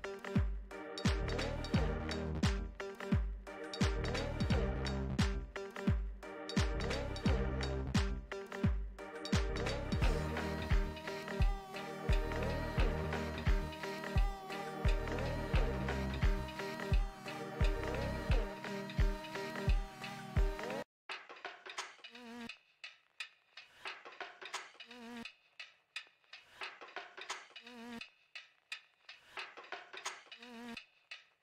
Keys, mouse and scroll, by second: 1.2-4.0 drag, 6.1-8.3 shift+middle drag, 8.3-11.0 drag, 11.6-15.2 middle drag, 15.2-17.9 drag, 26.9-28.8 middle drag, 28.8-31.4 drag.